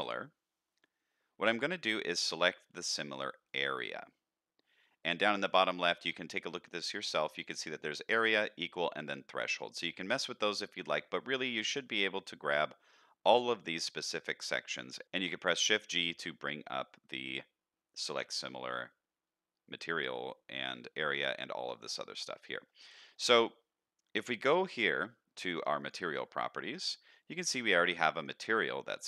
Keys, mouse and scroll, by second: 11.1-11.8 middle drag, 12.7-13.7 middle drag, 14.0-14.7 middle drag, 14.9 shift+middle drag, 22.3-22.6 middle drag, 22.8 scroll down 2, 23.1 shift+middle drag, 23.4 middle click, 25.8 click.